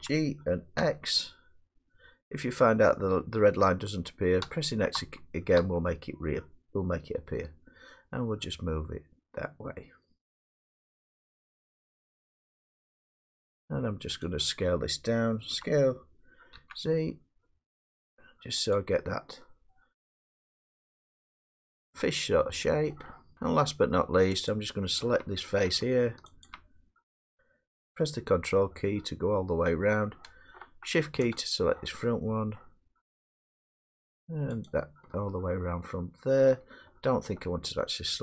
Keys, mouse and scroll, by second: 0.0-0.8 typing, 0.8-2.1 middle drag, 4.4-5.6 typing, 14.2 click, 15.5 s, 16.5 z, 18.7 click, 20.9-22.7 drag, 22.5 middle drag, 23.4 middle click, 24.5 click, 25.7 middle click, 26.4 ctrl+click, 30.0 middle click, 31.4 shift+click, 32.6 middle click, 34.7 ctrl+click, 36.5 middle click.